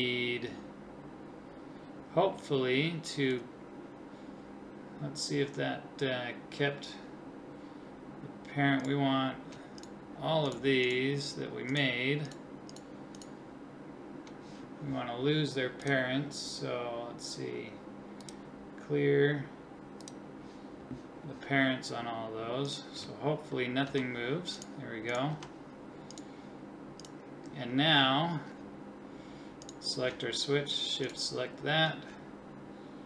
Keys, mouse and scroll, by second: 23.9 g, 25.3 g, 28.8-33.0 right drag.